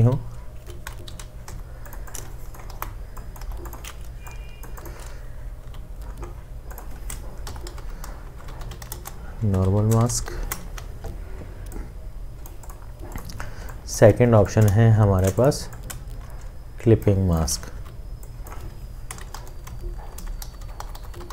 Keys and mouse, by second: 1.1 v, 1.5 Delete, 5.6 t, 7.6-10.3 typing, 10.7 Escape, 13.6 space, 14.3 space, 14.5 alt+click, 15.9 alt+shift+click, 17.8 t, 19.3-21.3 typing.